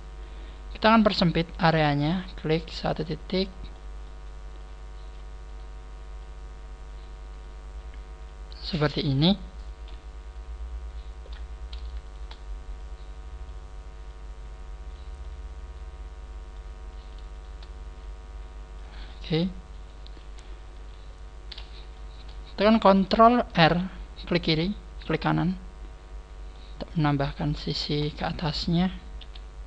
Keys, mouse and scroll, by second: 0.2 middle click, 1.0-1.5 scroll up 1, 2.1 right click, 2.1-2.5 scroll up 2, 2.5 click, 3.6 middle click, 4.5 click, 5.4 right click, 6.1 click, 7.4 click, 8.5-8.8 scroll down 3, 8.8 middle click, 10.2 middle click, 12.0 shift+right click, 12.7 click, 14.0 click, 15.2 middle click, 16.8 right click, 17.3 shift+right click, 18.0 click, 19.0 middle click, 20.1 KP_1, 20.8 KP_3, 21.2 scroll down 3, 21.9 shift+middle click, 21.9 scroll down 1, 22.3 scroll up 1, 23.1 scroll up 2, 23.5 ctrl+r, 25.0 right click, 25.3 middle click, 27.3 right click, 27.7 shift+right click, 29.2 KP_1.